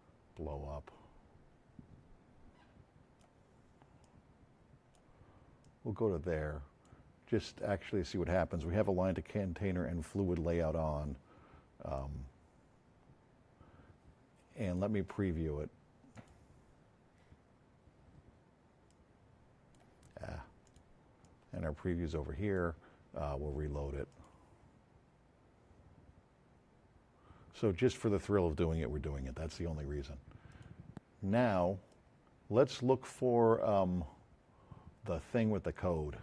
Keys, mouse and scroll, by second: 3.1 click, 4.0 click, 5.6 click, 11.9 click, 12.9 F7, 18.8 click, 20.9 F7, 24.0 click, 30.4 click, 34.1 F7, 36.1-36.2 drag.